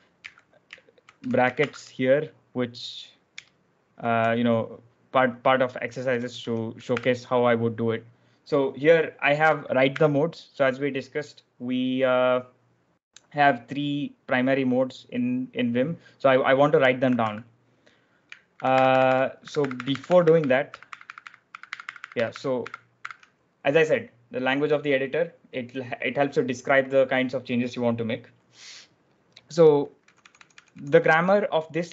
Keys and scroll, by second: 1.1-1.5 typing, 3.3 Return, 3.6-6.8 typing, 9.8 w, 17.1 z, 18.4 ctrl+e, 18.4 typing, 18.6 ctrl+e, 29.9-30.6 typing.